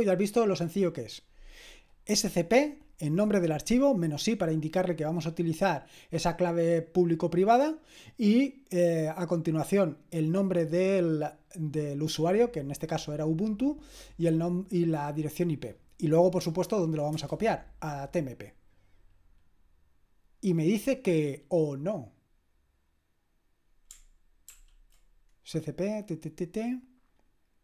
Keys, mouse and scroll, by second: 17.1 Return, 24.5 ctrl+p.